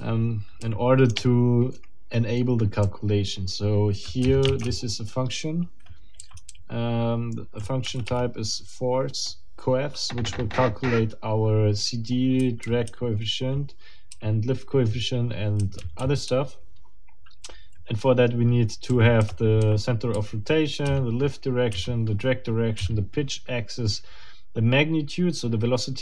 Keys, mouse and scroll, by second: 2.9 k, 4.2 j, 6.2 k, 6.3 Escape, 6.5 k, 7.8 w, 12.4 j, 14.1 j, 17.5 k, 18.9 k, 19.2 b, 20.1 j.